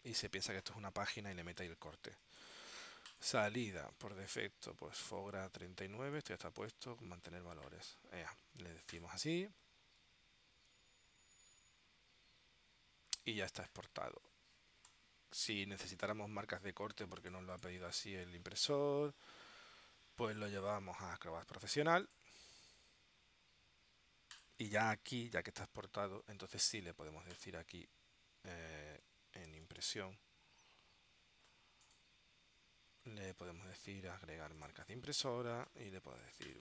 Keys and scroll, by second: 29.3-30.5 typing.